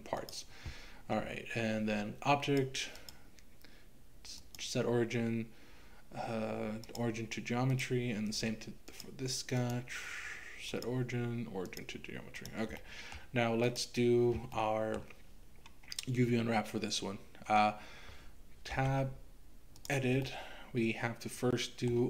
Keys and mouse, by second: 2.6 click, 3.1-7.0 drag, 7.7 click, 9.0-11.8 drag, 12.4 click, 12.9 middle click, 14.6 middle click, 18.7 Tab, 20.3-21.9 middle drag.